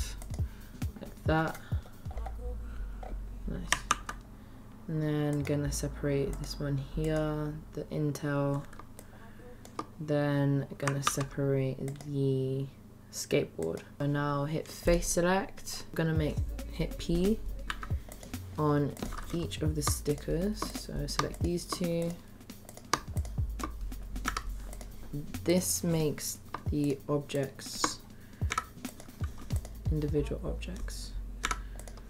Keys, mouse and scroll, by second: 3.8 ctrl+r, 7.1 click, 9.2 shift+middle click, 11.0 ctrl+r, 14.0 click, 15.5 middle click, 18.9 click, 20.6 click, 22.6 click, 23.2 shift+click, 29.5 click.